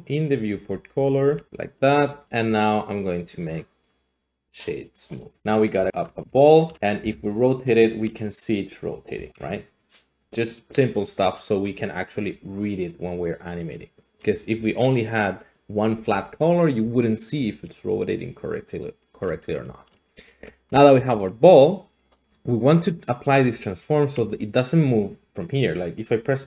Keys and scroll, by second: 1.4 ctrl+v, 9.3 Escape.